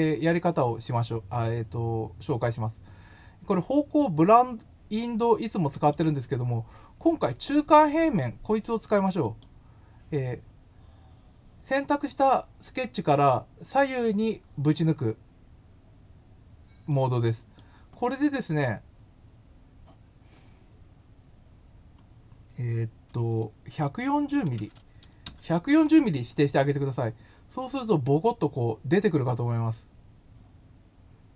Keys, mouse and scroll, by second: 5.7 click, 9.2 click, 16.8 click, 17.2 click.